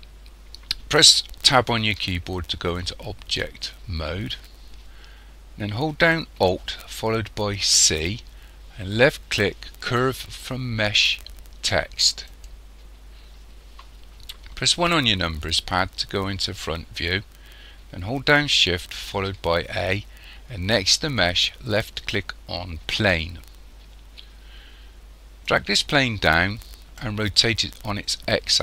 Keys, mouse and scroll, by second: 1.8 Tab, 7.8 alt+c, 14.8 KP_1, 19.1 shift+a, 25.5 click.